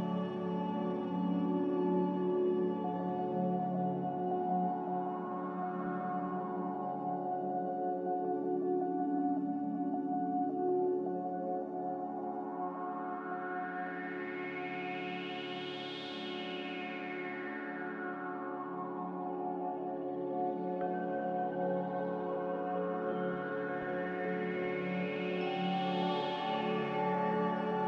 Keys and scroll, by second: 0.7 Tab, 5.0-5.9 typing, 9.3 2, 12.6 typing, 14.1 typing, 15.5 typing, 17.3 ctrl+z, 20.4 1, 25.1 z.